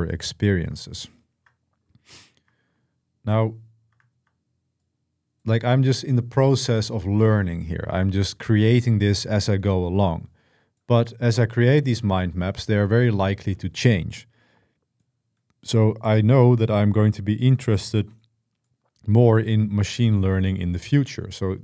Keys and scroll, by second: 3.0 typing.